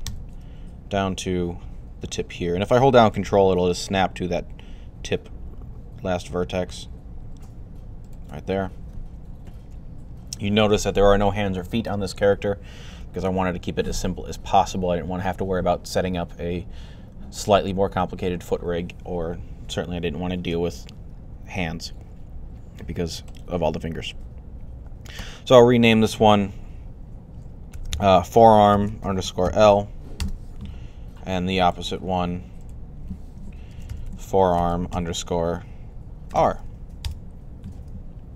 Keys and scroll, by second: 27.4-29.4 typing, 33.3-36.1 typing.